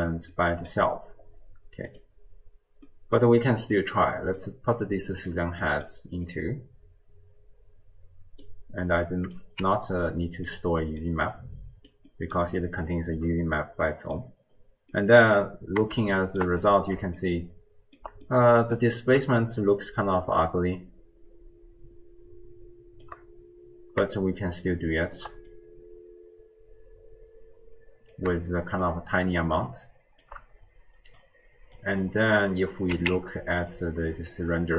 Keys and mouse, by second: 0.5 middle click, 1.9 click, 3.0 middle click, 4.5 click, 6.3-8.6 drag, 9.0-9.4 drag, 9.6 g, 11.0 click, 11.3 click, 12.1 middle click, 13.9 middle click, 14.9-15.4 middle drag, 16.0-16.5 shift+drag, 17.2 shift+drag, 17.4-18.2 shift+middle drag, 18.5 middle click, 19.9-23.1 shift+drag, 24.3-25.4 shift+drag, 25.5-28.1 drag, 28.9-30.2 shift+drag, 31.2 click, 32.0 click, 32.1 middle click, 32.2 click, 32.2 right click, 32.5 middle click, 32.9 z.